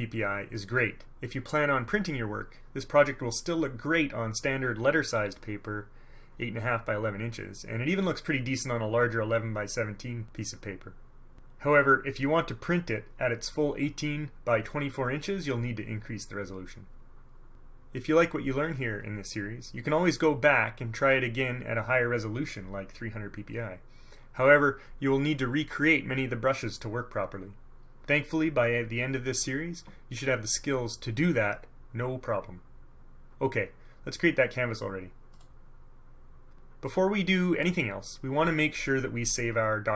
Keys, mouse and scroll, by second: 35.5 click.